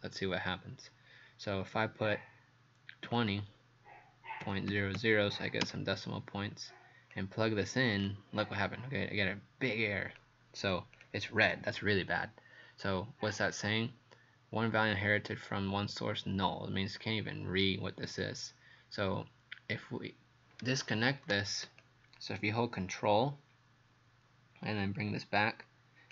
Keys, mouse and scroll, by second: 3.1 KP_2, 4.4 KP_Decimal, 4.7 KP_0, 5.0 KP_0, 5.6 KP_Enter, 7.1 click.